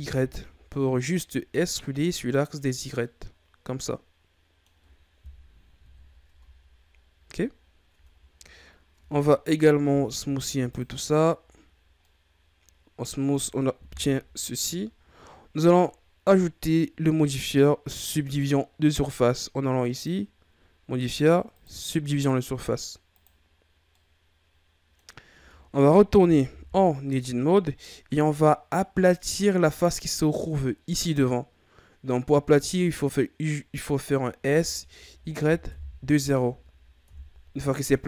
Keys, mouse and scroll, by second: 2.8 scroll down 1, 3.0-5.8 middle drag, 5.8 KP_1, 6.2 Tab, 6.9-7.5 scroll down 1, 7.5-7.9 scroll up 4, 7.9 Tab, 8.2-8.6 scroll down 3, 8.6 scroll up 3, 8.9 Tab, 9.8 w, 11.5-12.0 scroll down 5, 12.0-13.8 middle drag, 13.8 KP_1, 15.3-18.4 scroll up 2, 19.9-22.9 drag, 23.1 click, 23.9-25.3 middle drag, 25.3 Tab, 26.6 KP_3, 27.7-28.2 ctrl+scroll down 5, 28.2-30.8 scroll up 3, 34.3 s.